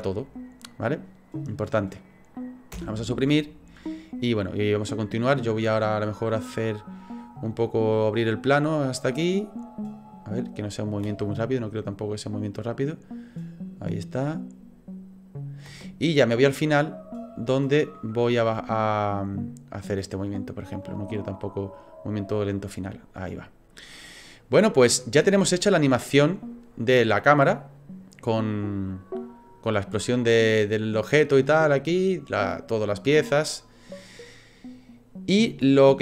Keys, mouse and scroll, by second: 1.9 right click, 2.7 Delete, 3.8 click, 7.0-7.6 scroll down 2, 7.5 middle click, 9.6 click, 11.0 space, 15.7 space, 16.3 click, 21.2 click, 25.2 space, 35.4 space.